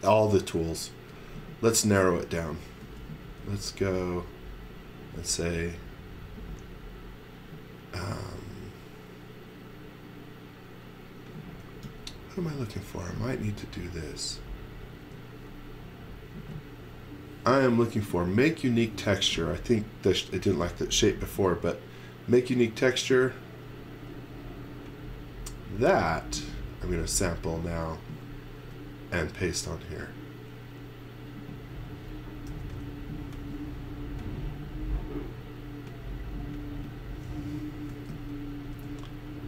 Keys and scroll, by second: 2.8 x, 3.2 space, 11.8 c, 15.0 space, 27.1 x, 27.4 v, 28.6 space, 32.5 n, 37.7-38.7 typing.